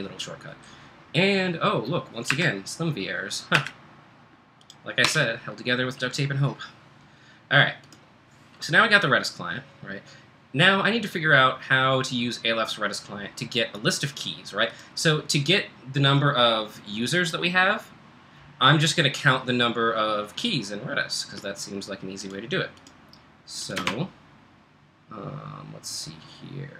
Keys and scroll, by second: 2.3 Return, 3.6 Return, 5.0 Escape.